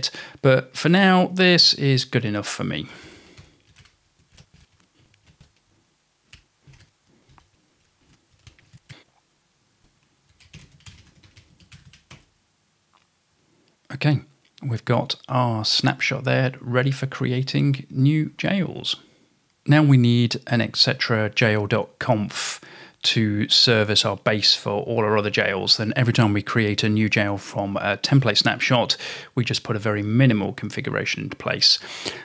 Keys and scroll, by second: 1.1-8.8 typing, 9.8 Return, 10.1-12.7 typing, 19.2-19.9 typing.